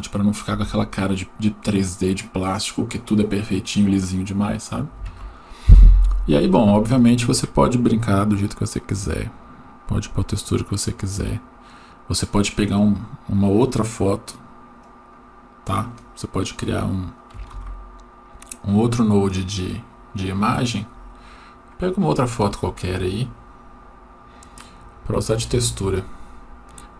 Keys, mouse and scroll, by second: 8.9-10.4 drag, 14.8-15.2 drag, 17.5 click, 17.6 shift+d, 19.6 click.